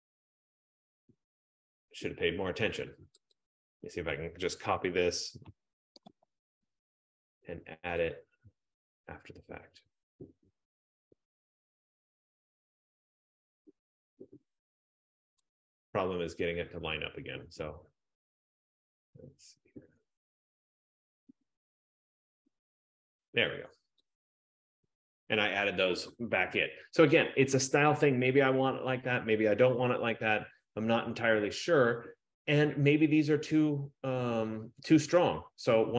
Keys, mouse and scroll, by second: 0.2-1.9 scroll, 1.3 click, 3.5-6.1 click, 6.1 ctrl+c, 6.5 ctrl+v, 15.5-20.5 drag, 18.1 F15, 23.4-25.6 drag.